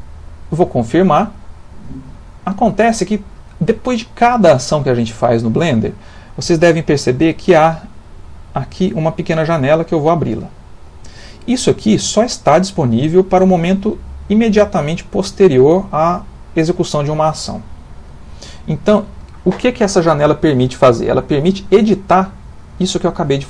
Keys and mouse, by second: 10.0 click, 21.1 click, 22.4 click.